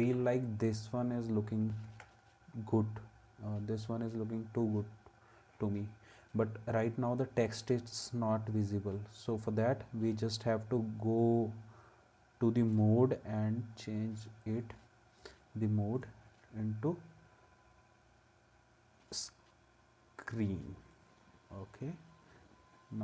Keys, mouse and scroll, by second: 1.9 ctrl+s.